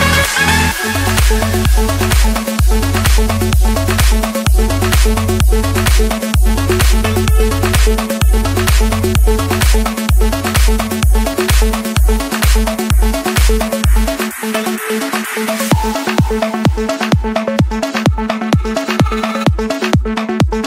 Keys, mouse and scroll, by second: 0.9-2.0 drag.